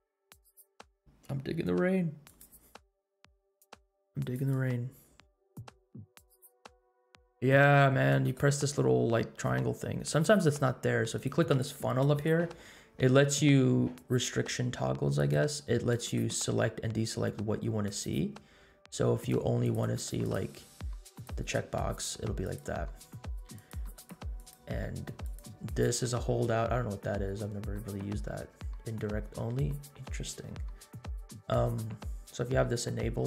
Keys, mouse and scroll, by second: 0.0 space, 0.5 scroll up 1, 2.2 click, 4.3 click, 10.3 click, 11.4-14.4 drag, 15.1-21.2 drag, 22.4-33.2 drag.